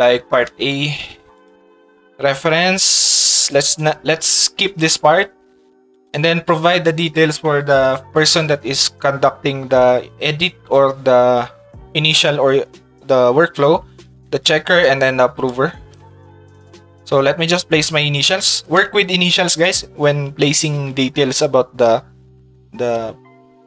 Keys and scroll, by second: 0.7 Tab, 17.7 shift+e, 19.2 shift+d, 19.4 shift+d.